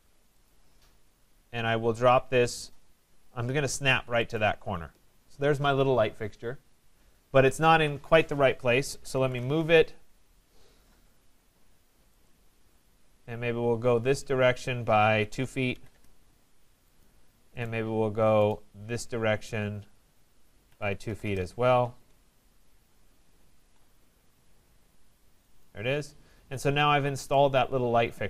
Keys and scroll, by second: 9.2 Return, 15.9 Return, 21.2 Return.